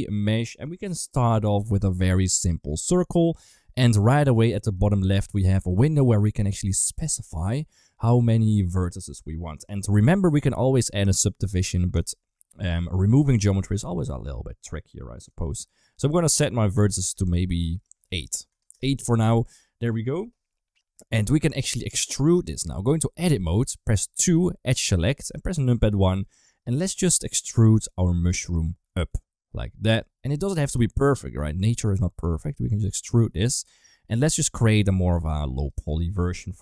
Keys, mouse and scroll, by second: 4.5 click, 6.5-9.5 drag, 11.8-16.9 drag, 17.6-18.6 drag, 19.7 right drag, 21.2 KP_1, 22.7 middle click, 23.1 Tab, 24.0 2, 25.2 KP_1, 26.1 shift+middle click, 28.5 e, 30.3 shift+middle click, 30.6 g, 31.2 s, 32.1 g, 33.3 e, 34.3 r, 34.9 s, 35.9 shift+middle click.